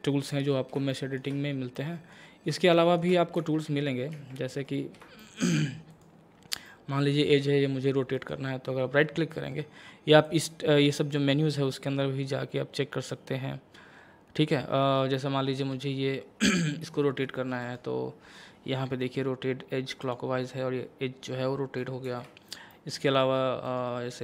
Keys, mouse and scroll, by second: 0.5 scroll down 1, 0.9 shift+middle click, 1.4 scroll up 1, 1.8 middle click, 2.3 scroll up 1, 2.7 shift+middle click, 3.4 Tab, 3.7 scroll up 1, 4.1 Tab, 4.8 scroll up 1, 5.2 shift+middle click, 5.9 click, 6.7-8.2 middle drag, 8.2 right click, 10.2 click, 15.2-17.6 middle drag, 17.6 right click, 20.0 click, 22.1 ctrl+z, 22.7 middle click, 23.7 right click.